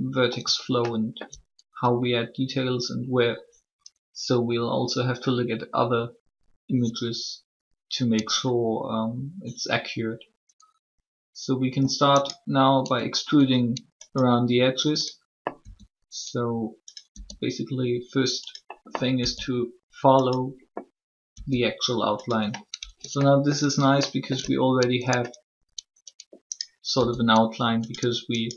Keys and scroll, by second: 15.6 e, 17.1 e, 19.1 e, 21.3 e, 26.9 e.